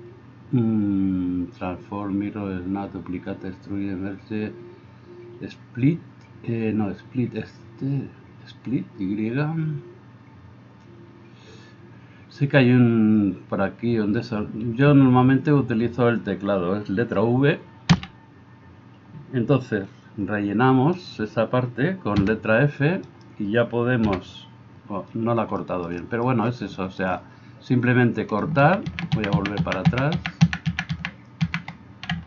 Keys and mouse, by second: 17.9 v, 22.2 f, 23.1 middle click, 23.1 right click, 28.9 ctrl+z, 29.2 ctrl+z, 29.4 ctrl+z, 29.7 ctrl+z, 30.0 ctrl+z, 30.2 ctrl+z, 30.4 ctrl+z, 30.7 ctrl+z, 30.9 ctrl+z, 31.5 ctrl+z.